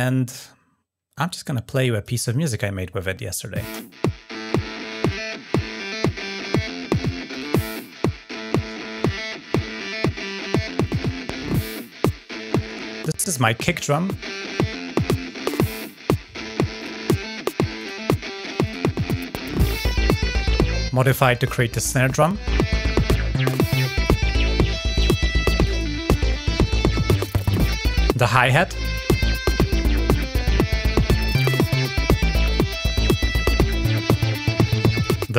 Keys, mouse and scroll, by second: 1.5-1.9 drag, 7.1 click, 10.6 click, 11.2-11.7 scroll down 3, 16.5 click, 17.5 click, 18.2 click, 19.4 scroll down 2, 21.0 scroll down 2, 23.7 click, 24.7 click, 25.3 click, 26.9 ctrl+scroll down 1, 30.0 middle click, 31.3 click, 32.2 click, 32.9 click, 34.4 click.